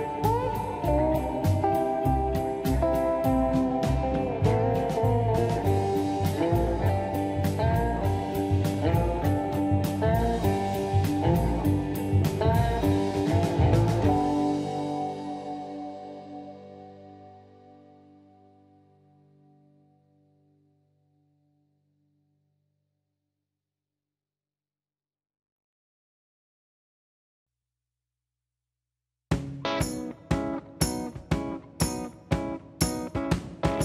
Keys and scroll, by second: 1.6 space, 2.3 m, 4.0 space, 4.4 m, 5.8 space, 6.8 m, 8.6 space, 8.8 Escape, 10.1 space, 29.9 Return.